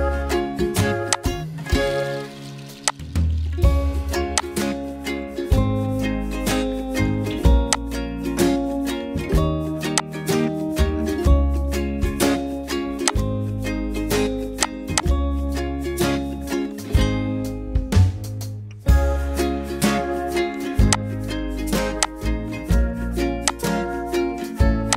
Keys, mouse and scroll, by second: 1.7 ctrl+right click, 6.0 ctrl+right click.